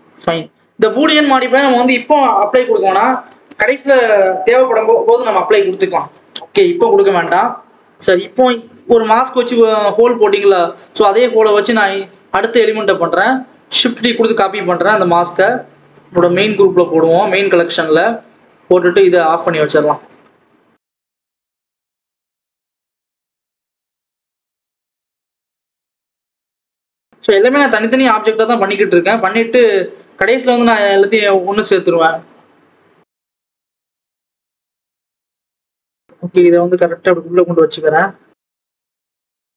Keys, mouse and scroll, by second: 0.4-1.3 scroll down 1, 8.0-8.4 scroll down 1, 8.4-9.0 scroll up 1, 9.0-10.6 scroll up 1, 10.6 click, 11.4 click, 11.6 scroll up 2, 11.9-13.6 scroll down 2, 13.6 shift+d, 16.0 click, 19.1 click, 19.8-20.2 scroll down 1, 20.4 Tab, 20.8 s, 21.8 click, 22.5 click, 23.3 click, 23.4 a, 23.6 s, 24.9 KP_7, 25.2 scroll up 1, 25.4 Tab, 25.8 click, 26.4 scroll down 1, 26.7 click, 27.2 scroll up 1, 27.4 g, 28.7 KP_1, 29.1-30.1 scroll up 1, 30.1 click, 30.3-30.9 scroll up 2, 30.9 Tab, 31.0 s, 32.2 Tab, 32.5 g, 34.4 click, 34.8-35.3 scroll down 2, 35.3 click, 35.4 scroll down 1, 35.6-35.9 scroll up 1, 35.9 click, 37.0 Tab, 37.3 s.